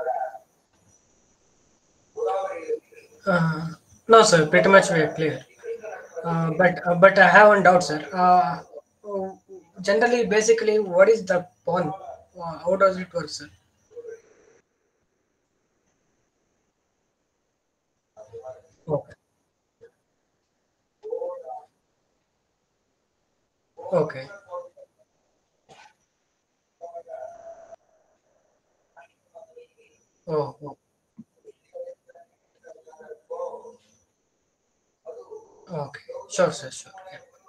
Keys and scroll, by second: 10.3 w, 24.7 w.